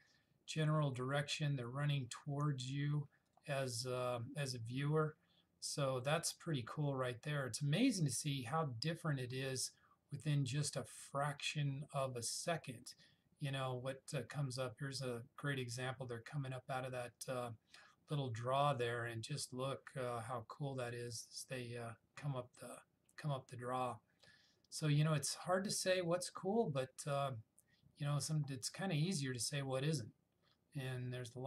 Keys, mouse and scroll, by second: 3.4 click, 7.5-10.5 scroll down 2, 24.0-25.8 scroll down 1, 26.0-26.5 scroll down 1.